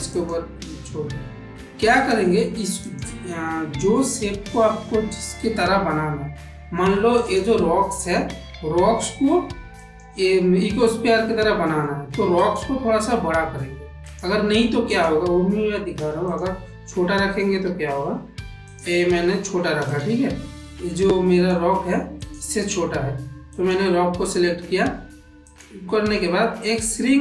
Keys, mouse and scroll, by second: 1.8 click, 5.0 click, 7.0 click, 9.6 click, 11.1 middle click, 12.3 click, 13.8 click, 14.8 click, 15.4 s, 17.5 g, 18.9 s, 20.2-21.4 middle drag, 22.1 click, 23.4 click, 25.5-27.2 drag.